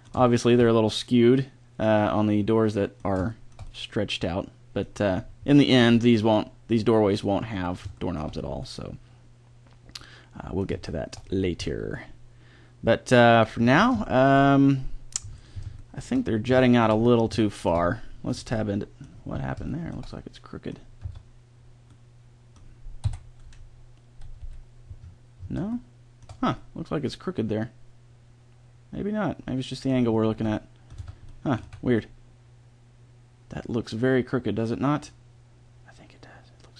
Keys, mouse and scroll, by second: 5.2-10.0 middle drag, 10.1 middle click, 10.9-13.3 middle drag, 13.9-15.3 middle drag, 15.9-16.5 middle drag, 16.6 middle click, 17.3-20.1 middle drag, 21.0 Tab, 23.0 KP_7, 24.5 KP_Decimal, 25.1 middle click, 30.3 z, 31.0 Tab, 31.6 z.